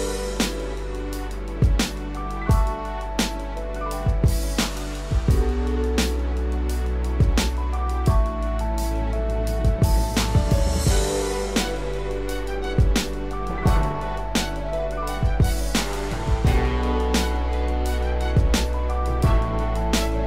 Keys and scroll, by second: 9.2 ctrl+=.